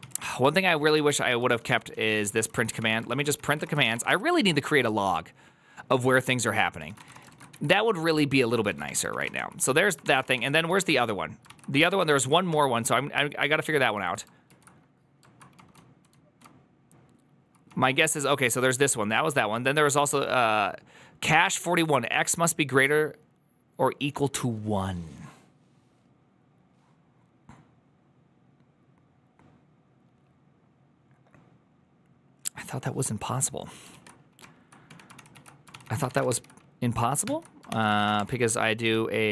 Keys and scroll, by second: 0.0 ctrl+c, 0.8 ctrl+u, 1.3 ctrl+u, 1.5-4.4 typing, 7.0-17.5 typing, 10.1 Return, 11.4 ctrl+c, 14.3 ctrl+u, 35.0 ctrl+a, 35.0 ctrl+c, 35.0-36.5 typing, 35.2 ctrl+c, 35.6 ctrl+c, 37.1 ctrl+t, 37.5-39.3 typing.